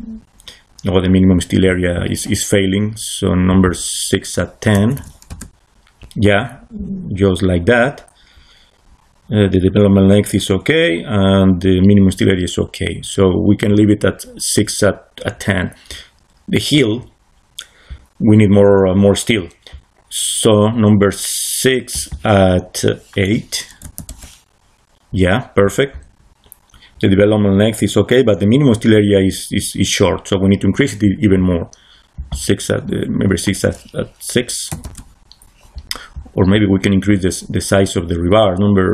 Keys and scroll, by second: 4.4-5.4 typing, 23.7 8, 24.0 Return, 34.6 6, 34.7 Return.